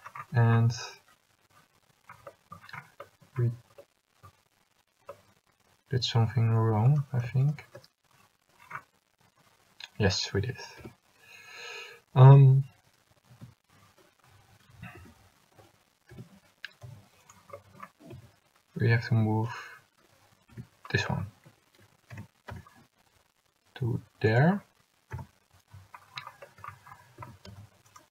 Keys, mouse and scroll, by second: 3.5 a, 10.9 l, 13.5 l, 15.1 a, 16.3 l, 17.0 g, 18.3 a, 19.3 l, 20.7 l, 22.3 g, 27.3 a, 28.0 c.